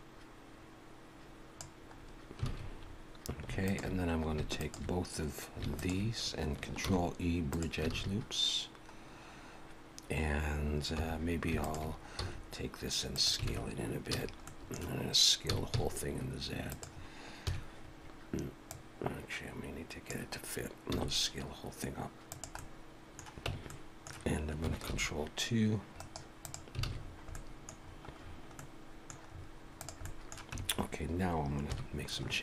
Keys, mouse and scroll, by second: 1.8-3.0 scroll up 4, 2.4 alt+a, 3.6 alt+shift+click, 6.9 ctrl+e, 7.9 alt+a, 8.3-8.9 scroll down 1, 9.6 scroll up 1, 11.0 3, 11.6 alt+shift+click, 12.2 s, 13.5 alt+a, 13.6-14.5 scroll down 3, 14.1 a, 14.5 middle click, 15.5 s, 17.5 KP_1, 18.7 click, 20.9 s, 22.6 middle click, 23.5 Tab, 23.7 middle click, 24.9 ctrl+2, 26.0 right click, 26.9 alt+a, 27.0-28.7 scroll down 8, 27.3 middle click, 28.6 middle click, 29.3-29.7 scroll up 4, 29.8 click, 30.0 middle click, 30.6 Tab, 30.7 scroll up 3, 31.7 KP_1, 32.1 scroll up 2.